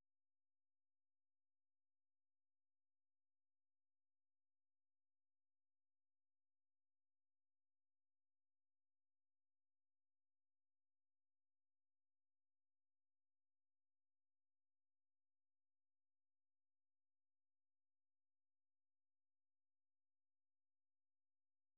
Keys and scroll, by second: 0.8 q, 1.7 super+2, 2.8 F6, 3.6-11.1 typing, 13.4 j, 17.5 typing.